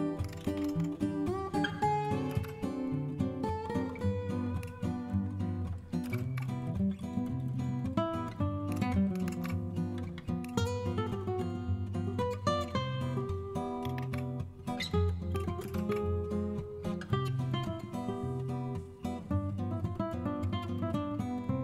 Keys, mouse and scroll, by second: 0.0-1.1 typing, 2.2 Return, 6.0 super+Return, 8.9-9.7 typing, 13.8 super+h, 15.6 super+Return.